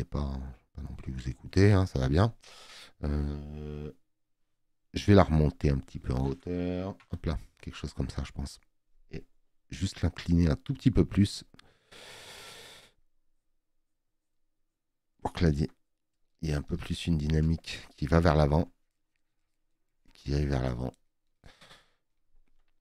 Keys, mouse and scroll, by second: 5.4 Up, 5.7 Up, 6.1 Up.